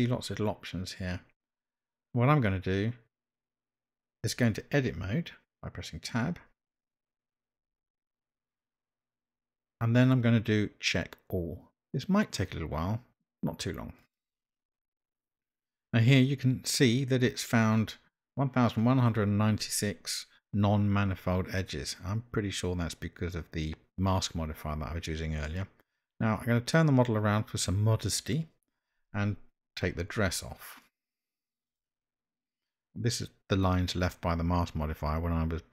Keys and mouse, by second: 6.2 Tab, 7.9 Tab, 25.5-27.7 middle drag, 31.7 click.